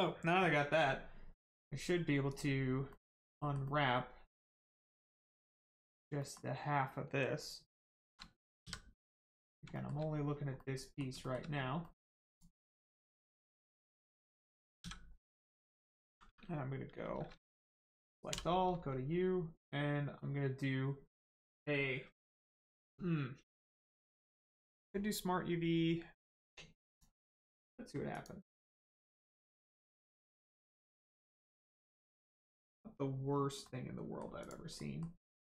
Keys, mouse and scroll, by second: 1.3 middle click, 2.2 click, 2.9 middle click, 6.2 middle click, 9.1 middle click, 9.7 shift+middle click, 10.2 scroll up 1, 10.6 middle click, 11.2 shift+middle click, 11.4 scroll down 1, 11.8 middle click, 12.6 middle click, 13.6-14.8 scroll up 1, 14.8 a, 15.1 middle click, 15.6-17.3 scroll down 1, 26.8 click, 29.0 scroll up 1, 29.8 middle click, 31.7-32.1 scroll up 1, 33.2-33.6 scroll down 1, 33.6 middle click, 34.4 click, 34.8 middle click, 35.2-35.5 scroll up 1.